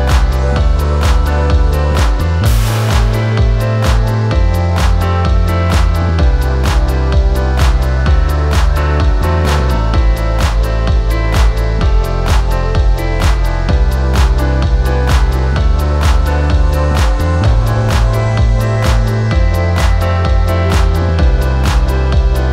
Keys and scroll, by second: 15.1 ctrl+shift+y, 18.5 c, 18.7 f.